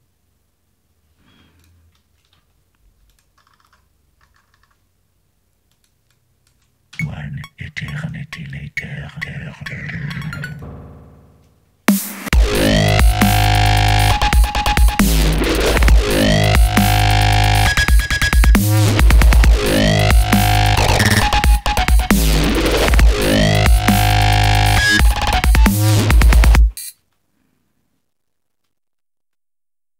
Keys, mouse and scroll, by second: 1.7 click, 3.0 click, 5.9 click, 6.9 space, 10.5 click, 14.6-15.0 scroll down 2, 15.6-16.0 scroll up 2, 16.6 scroll up 2, 17.4-17.8 scroll up 2, 18.7-19.5 scroll down 3, 19.9 scroll down 1, 21.2 click, 25.0 ctrl+scroll up 2, 25.6 ctrl+scroll down 2, 27.0 space.